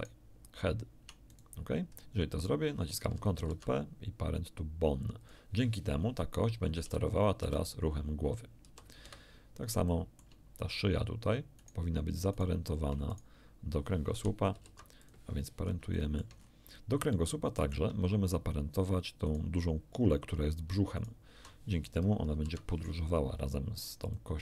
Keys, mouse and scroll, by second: 1.3 shift+right click, 1.9 shift+scroll down 2, 3.4 ctrl+p, 5.2 click, 6.9 r, 7.4 r, 8.7 r, 9.0 Escape, 9.5 scroll down 1, 9.9 shift+click, 9.9 shift+middle click, 11.6 right click, 12.3 shift+right click, 13.1 shift+right click, 14.5 ctrl+p, 15.0 ctrl+click, 15.6 ctrl+scroll down 2, 15.9 shift+middle click, 16.3-16.7 shift+scroll up 1, 17.1 shift+middle click, 19.3 right click, 21.0 shift+right click, 22.3 ctrl+p, 24.1 click.